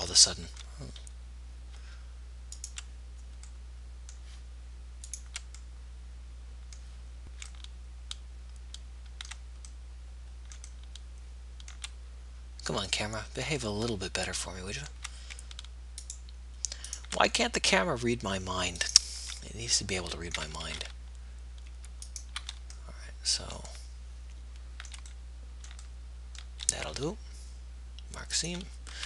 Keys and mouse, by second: 1.6-3.8 middle drag, 3.8-5.4 right drag, 6.0 middle click, 7.2-13.2 middle drag, 16.3-17.6 right drag, 17.6 middle click, 19.2 middle click, 20.8 ctrl+z, 23.1 middle click, 25.6 middle click.